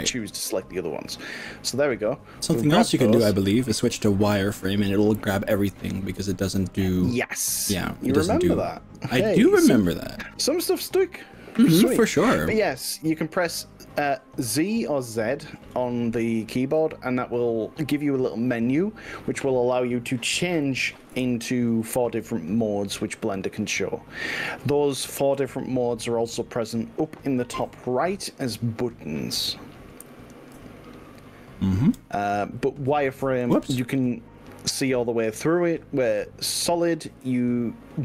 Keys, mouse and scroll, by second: 1.1-2.7 middle drag, 9.3-15.3 middle drag, 16.9 z, 19.4 click, 19.8-20.4 middle drag, 21.1 KP_1, 21.9 click, 22.6-28.1 middle drag, 30.5-31.9 r, 32.7 middle click, 33.5 ctrl+click, 33.9 ctrl+z, 34.8 z, 37.4-38.0 middle drag.